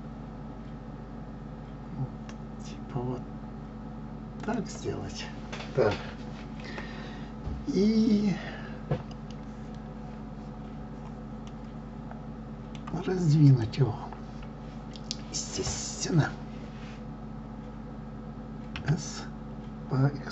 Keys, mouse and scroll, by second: 11.4-13.6 middle drag, 13.6 click, 18.8 s.